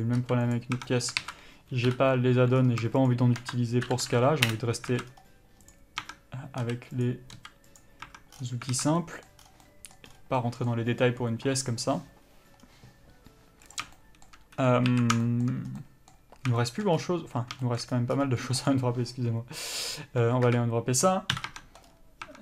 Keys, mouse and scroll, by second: 0.8 click, 1.1 Tab, 1.3 middle click, 1.4 alt+z, 2.1 KP_Divide, 2.8-3.3 scroll up 1, 3.3 shift+click, 4.8 Return, 5.1 alt+a, 5.3-6.0 scroll down 1, 6.0 click, 6.3 Tab, 6.9 s, 8.0 click, 8.3 Tab, 8.6 scroll down 1, 9.0 alt+a, 9.2 middle click, 9.7 scroll down 1, 9.9 middle click, 10.3 scroll up 1, 10.7 middle click, 12.5 scroll up 1, 12.9-13.2 scroll down 1, 14.0 click, 14.2 shift+middle click, 14.8-15.1 scroll down 1, 15.1 alt+a, 15.5 shift+middle click, 15.9 scroll down 1, 16.0 middle click, 16.8 shift+middle click, 17.2 scroll up 1, 17.9 shift+middle click, 18.2 scroll up 1, 18.9 click, 20.7 KP_Decimal, 21.6 KP_Divide, 21.7 Tab, 22.1 scroll up 1.